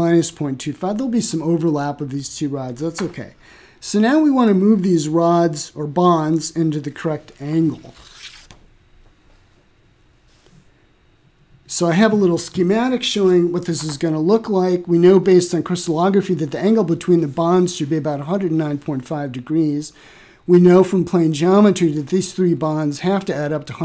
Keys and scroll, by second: 3.4-5.1 typing, 5.4 Return.